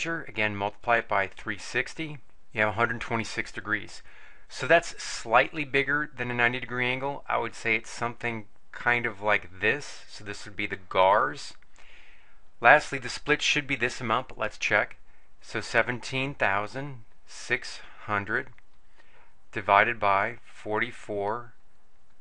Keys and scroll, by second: 0.7 3, 1.3 6, 1.9 0, 2.2 Return, 15.6-18.5 typing, 20.5 4, 20.9 4, 21.7 0.